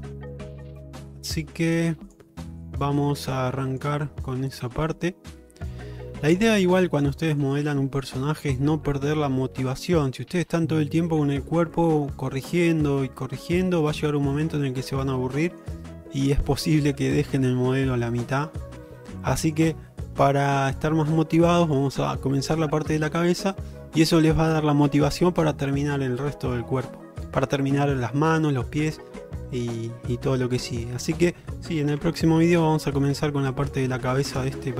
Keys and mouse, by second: 1.1 click, 1.9 click, 2.6 click, 3.3 click, 4.4 middle click, 5.0 shift+middle click, 5.3-7.1 middle drag, 7.4 shift+middle click, 7.7-10.8 middle drag, 11.9 middle click, 13.9 middle click, 14.7 shift+middle click, 15.0 middle click, 16.3 middle click, 17.4-18.5 middle drag, 19.0 middle click, 20.2 shift+middle click, 20.6 middle click, 21.7 shift+middle click, 32.0 Tab, 32.5 click, 33.0 shift+middle drag.